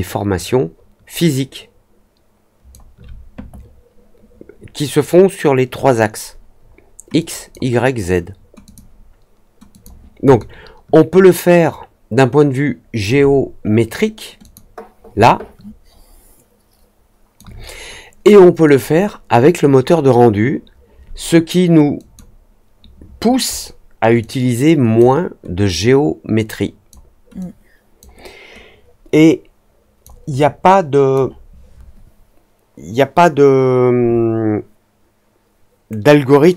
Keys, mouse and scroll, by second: 7.1-7.4 drag, 8.6 click, 9.6 click, 10.3-12.9 alt+drag, 14.3 click, 15.2-17.3 alt+drag, 18.6 click, 21.9 click, 24.1-24.9 drag, 25.6-26.8 drag, 27.3 click, 29.0 click, 30.3 click.